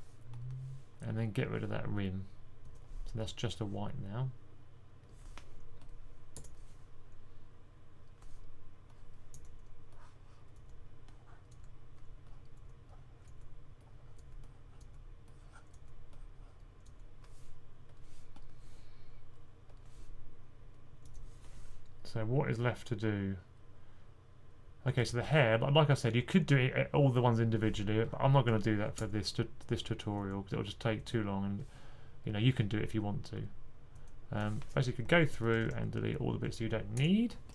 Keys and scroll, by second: 34.7-35.6 typing, 36.8-37.5 typing.